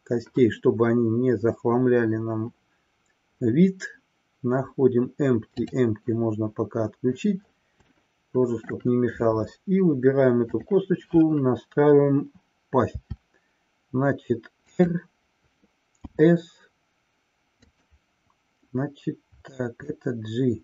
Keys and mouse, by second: 5.6 click, 8.0-9.0 shift+middle drag, 10.5 click, 14.8 click, 19.8-20.6 drag.